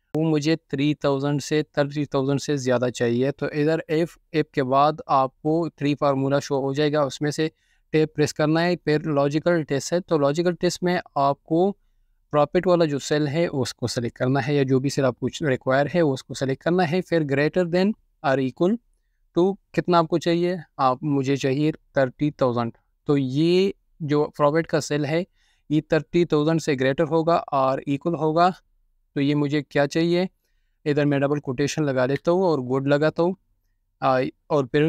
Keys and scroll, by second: 0.7-1.3 typing, 3.6-4.5 typing, 7.6 Tab, 8.1-8.9 typing, 15.4 typing, 16.5 typing, 20.4-22.4 typing, 27.0 typing, 31.5-33.8 typing.